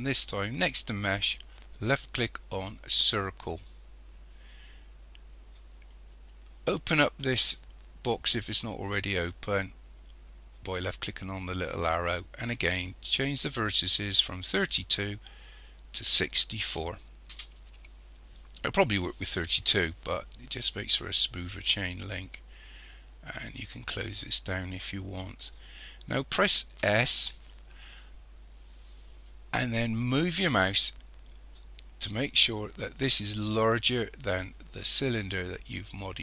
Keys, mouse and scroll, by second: 6.1 click, 8.3 click, 14.3 click, 23.9 click, 26.8 s.